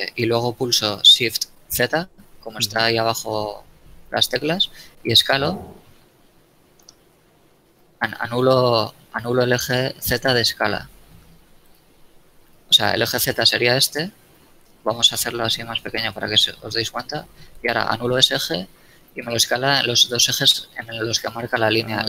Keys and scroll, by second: 1.6 shift+z, 7.3 shift+z, 12.9 s, 13.3 z, 17.3 shift+s, 17.7 shift+z.